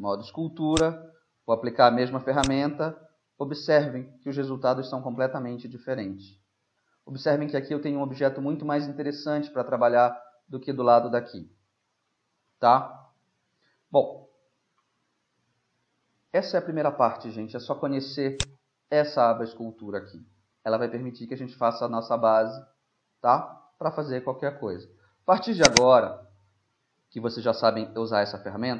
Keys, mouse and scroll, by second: 0.7 click, 1.3 right click, 1.4 click, 1.4 right click, 1.6 middle click, 2.4-4.5 drag, 2.4 right click, 6.0-8.0 middle drag, 8.2-10.6 middle drag, 10.8 middle click, 11.8-14.1 middle drag, 14.8-18.1 middle drag, 18.4-21.4 drag, 19.7-23.3 middle drag, 23.6-25.7 middle drag, 25.7-27.1 drag.